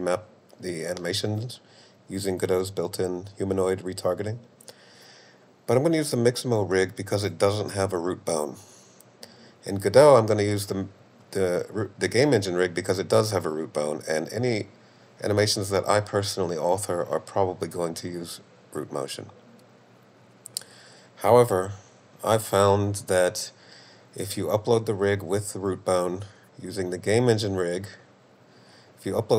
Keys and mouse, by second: 27.4-28.7 drag.